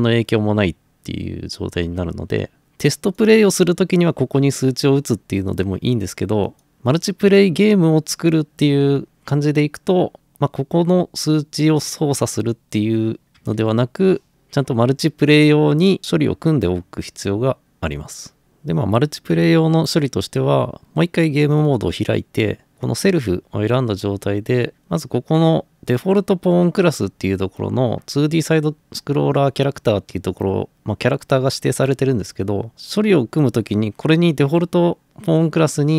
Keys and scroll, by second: 13.4 1, 13.5 Return.